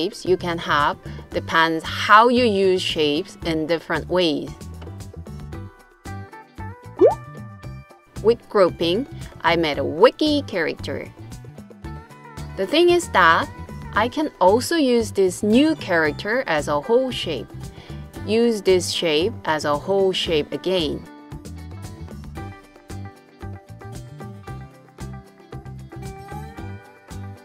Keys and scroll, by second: 13.1 super+c, 13.9 super+v.